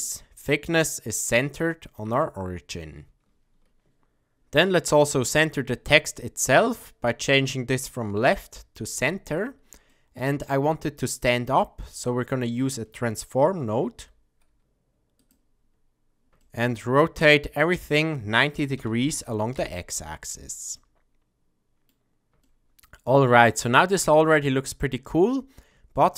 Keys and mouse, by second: 1.8-2.2 middle drag, 4.9-6.8 middle drag, 7.8-9.0 drag, 9.8-10.4 middle drag, 11.8 middle click, 13.8 shift+a, 16.4 shift+middle click, 17.5-20.2 drag, 20.7-21.9 middle drag, 22.4 shift+middle drag, 24.3 click, 25.9-26.1 shift+middle drag.